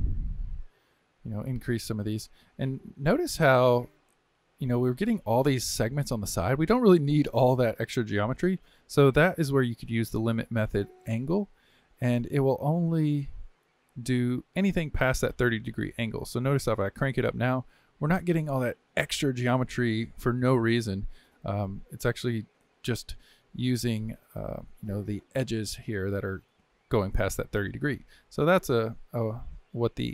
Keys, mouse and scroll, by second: 0.4-7.5 drag, 10.2-13.3 drag, 16.4-19.5 drag, 22.3-24.2 drag, 24.2-27.2 middle drag, 28.8-30.1 middle drag.